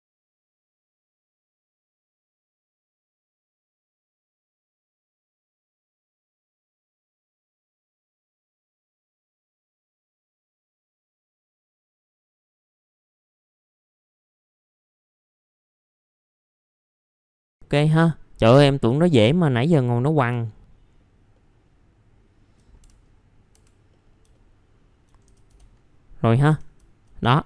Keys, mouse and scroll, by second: 0.1 middle click, 0.2 scroll down 1, 0.3 scroll up 1, 0.4 F3, 0.7 click, 1.1 F3, 1.3 alt+middle click, 1.8-2.3 scroll down 2, 2.1 alt+middle click, 2.8 alt+middle click, 3.1 scroll down 1, 3.7 middle click, 3.9 click, 4.1 alt+middle click, 5.0 scroll up 1, 5.1 alt+middle click, 5.4 click, 5.7 1, 5.9 alt+middle click, 6.4 F3, 6.6 click, 6.8-7.5 typing, 6.8 scroll up 1, 7.3 click, 8.3 alt+middle click, 8.7 click, 8.9 alt+middle click, 9.2-10.6 drag, 10.6 alt+middle click, 10.8 click, 11.2 click, 11.8 middle click, 11.9 alt+middle click, 12.1 click, 12.8 alt+middle click, 13.3 middle click, 13.5 alt+middle click, 13.7 middle click, 13.8 alt+middle click, 14.0 middle click, 14.6 alt+middle click, 14.9 middle click, 15.0 F3, 15.2 click, 15.4 F3, 15.7 alt+middle click, 15.9 alt+middle click, 16.2 click, 17.3 scroll down 1, 18.0 middle click, 18.4 F4, 18.8 middle click, 19.4 scroll up 1, 19.9 click, 20.4 alt+middle click, 21.3 alt+middle click, 23.0-23.5 scroll up 1, 23.5 F4, 23.9 middle click, 24.0 scroll down 1, 24.3 alt+middle click, 26.2 middle click.